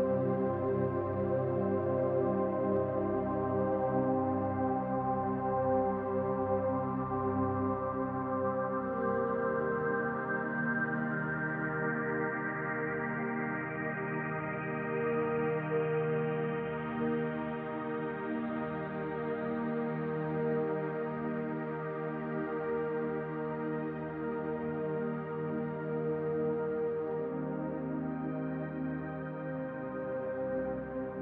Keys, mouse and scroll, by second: 1.2 click, 1.6-3.0 middle drag, 3.0 click, 3.2-5.3 middle drag, 5.3 click, 5.7-7.0 shift+middle drag, 7.0 click, 7.3-8.9 middle drag, 8.9 click, 9.1 scroll down 2, 9.4-12.4 shift+middle drag, 10.0-10.4 scroll up 2, 11.0-12.0 scroll up 2, 12.0-12.4 scroll up 1, 12.4 click, 12.7-14.1 middle drag, 14.1 click, 14.2-16.5 middle drag, 16.5 click, 16.9-18.3 middle drag, 18.3 click, 18.7 scroll down 2, 18.8-20.3 middle drag, 20.3 click, 20.6-22.6 middle drag, 22.6 click, 22.9-27.5 middle drag, 25.3 ctrl+z, 27.5 click, 27.8-29.4 middle drag, 29.4 click, 29.7-31.2 middle drag.